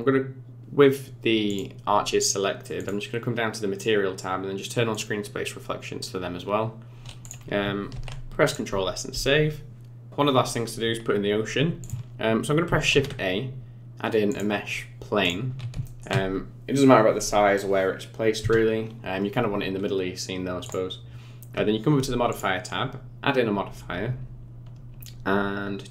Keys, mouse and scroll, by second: 1.4 click, 2.7 click, 3.6 scroll down 4, 4.9 click, 6.5 scroll down 4, 7.9 ctrl+s, 7.9 click, 11.8 click, 12.9 shift+a, 15.8 shift+middle click, 20.6 click, 22.3 click.